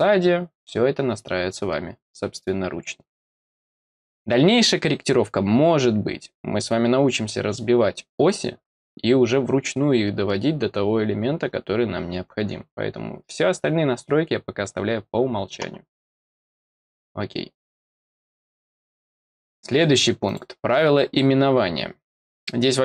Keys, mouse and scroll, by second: 16.6 click, 18.4 click, 19.2 click, 20.2 click.